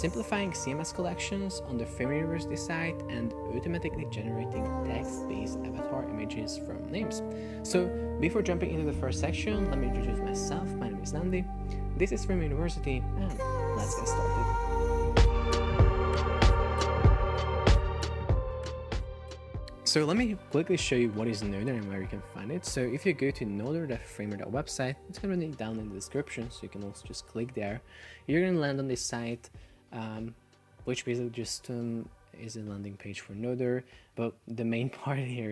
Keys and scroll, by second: 4.5 shift+d, 5.4 space, 5.5 shift+s, 6.3 Return.